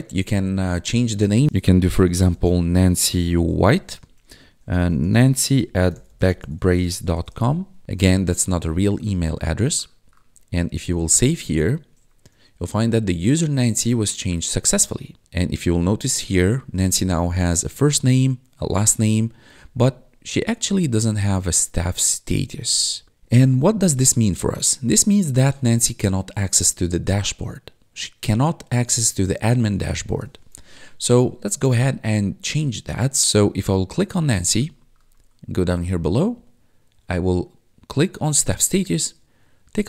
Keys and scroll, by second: 1.4-7.7 typing, 17.7 1, 19.8 1, 21.2 1, 30.2 ctrl+1.